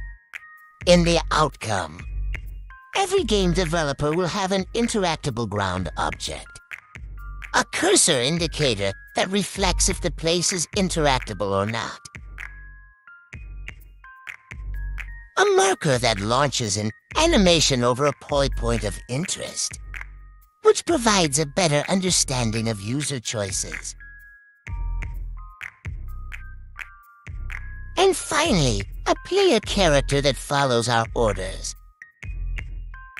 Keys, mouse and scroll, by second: 0.1 click, 5.4 click, 8.4 click, 9.3 click, 10.2 click, 10.7 click, 16.1 click, 17.1 click, 17.9 click, 18.8 click, 19.7 click, 20.5 click, 21.3 click, 22.0 click, 22.2 click, 22.7 click, 23.2 click, 23.5 click, 28.2 click, 28.9-31.0 drag, 32.8 click.